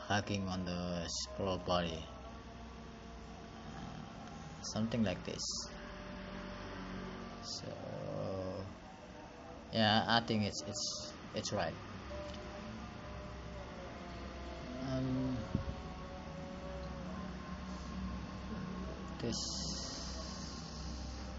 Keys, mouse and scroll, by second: 7.4 click, 10.1 click, 13.7 click, 15.2 click, 16.6 click.